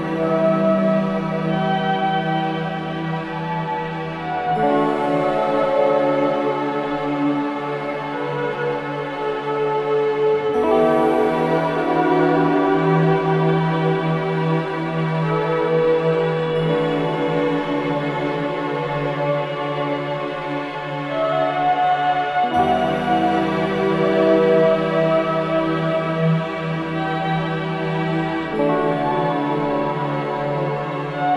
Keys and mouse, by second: 0.5 click, 0.8 typing, 3.9 click, 4.7 click, 5.4 click, 6.1-6.8 typing, 7.3 click, 7.7 click, 8.4 click, 8.7-9.5 typing, 9.4 alt+click, 10.7 click, 12.8 click, 13.2 alt+click, 14.2 click, 14.3 typing, 14.7 click, 15.1 click, 15.7 click, 16.1 click, 16.5 typing, 17.0 click, 18.0 alt+click, 19.1 alt+shift+click, 19.4-21.8 alt+drag, 19.7-20.5 typing, 23.9 click, 24.1 click, 25.0-27.7 alt+drag, 28.8 click.